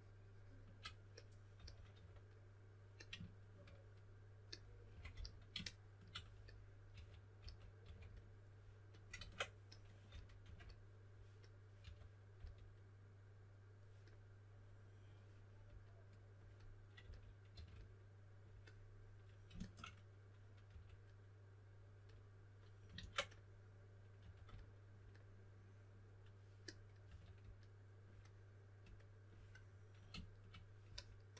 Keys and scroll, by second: 1.3-2.4 typing, 4.6-5.6 typing, 6.6-8.3 typing, 9.1 super+z, 10.0-10.4 typing, 11.8-12.3 typing, 16.7-18.0 typing, 20.6 2, 22.9 super+z, 24.1 2, 27.0 2.